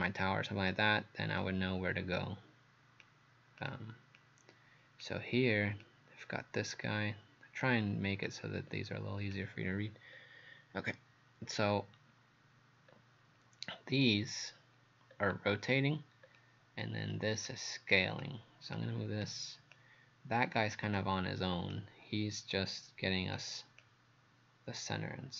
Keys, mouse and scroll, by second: 4.2 click, 5.8 click, 10.2-11.4 scroll up 1, 11.7 scroll down 1, 12.9-13.3 scroll up 1, 15.1-16.3 scroll down 1, 17.0-17.4 scroll up 1, 17.5 click.